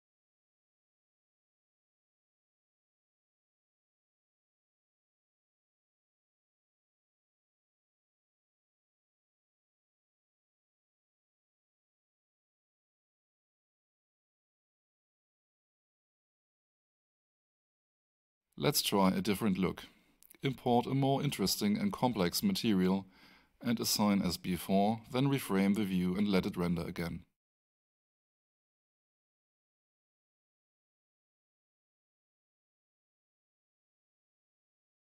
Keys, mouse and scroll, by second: 0.1 alt+click, 1.5 middle click, 3.2 right click, 5.1 click, 17.7 click, 20.3-21.1 scroll down 1, 22.3 click, 23.2-23.5 scroll down 1, 29.2 ctrl+click, 33.1 click.